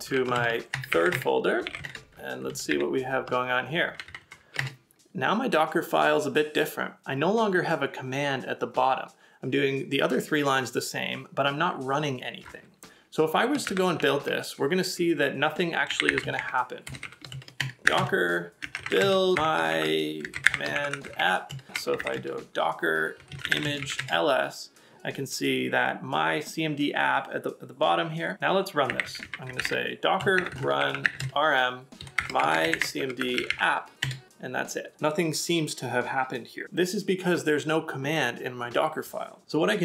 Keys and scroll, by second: 17.9 BackSpace, 28.9 typing.